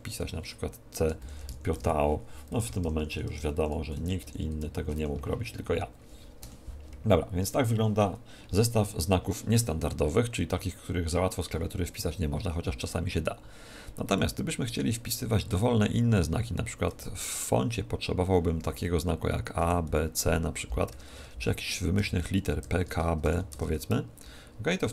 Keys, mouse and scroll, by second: 1.2-1.7 typing, 2.5 Left, 2.6 Left, 2.9 Left, 3.1 Left, 3.3 Left, 3.4 Left, 3.5 Left, 3.9 Right, 4.2 shift+Up, 4.5 shift+Home, 4.9 Delete, 6.4 End, 6.9-7.3 BackSpace, 10.5 Tab, 12.1-16.0 middle drag, 16.4 a, 16.9 Tab, 18.0-20.1 middle drag, 18.5 a, 19.5 b, 19.9 c, 20.9-23.2 typing, 23.5 Tab.